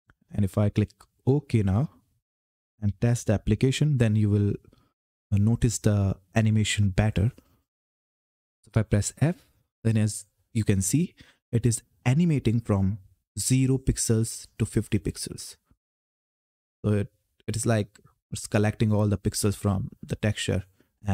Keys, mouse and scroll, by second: 0.9 click, 2.6 ctrl+F10, 8.9 f.